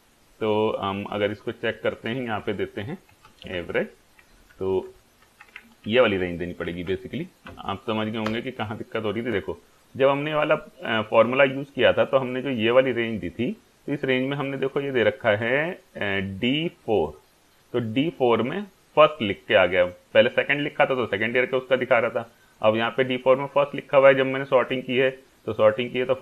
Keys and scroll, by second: 2.4-4.1 typing, 4.2 Down, 4.5 Up, 4.9 Tab, 5.0 Caps_Lock, 5.3 Left, 5.9 Up, 6.7 shift+Down, 8.3 Return.